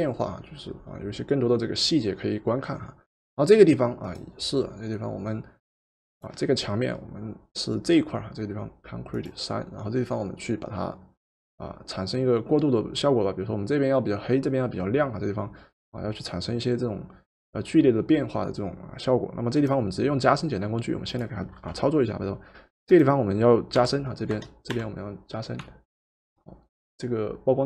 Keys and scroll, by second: 23.5-24.7 typing.